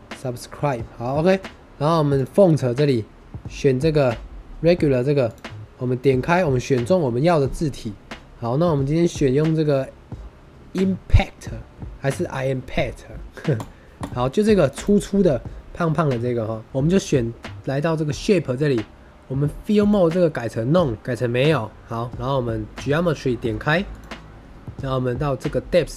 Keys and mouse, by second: 5.2 click, 19.8-21.0 drag, 23.9 click.